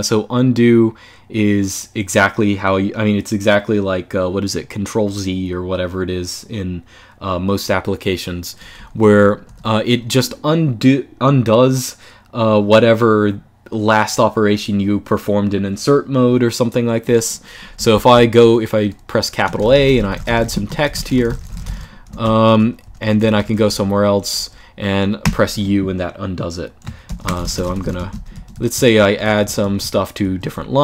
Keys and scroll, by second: 8.5-8.9 j, 9.2 k, 17.6 shift+a, 19.1-23.6 typing, 24.7-25.4 typing, 26.7-30.8 typing.